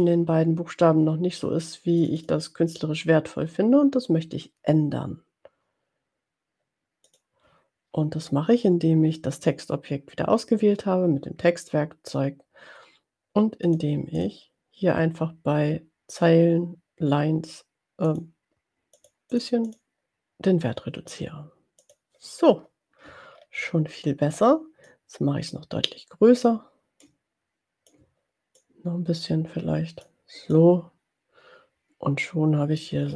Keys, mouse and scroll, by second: 1.9 click, 7.2 click, 13.7 click, 14.3 click, 18.4 click, 19.0 click, 19.7 click, 21.8 click, 23.6 ctrl+scroll down 2, 24.9-26.7 ctrl+drag, 27.0-28.1 ctrl+drag, 28.8-30.2 ctrl+drag, 30.9-33.0 drag.